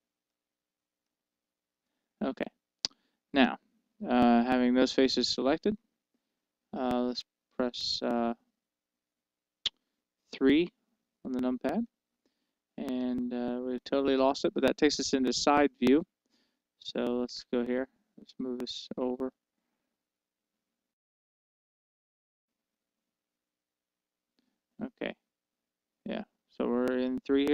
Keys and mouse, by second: 0.3-2.2 drag, 8.5-13.1 middle drag, 13.1 KP_3, 14.2-20.8 middle drag, 22.4-24.0 middle drag, 27.3 KP_3.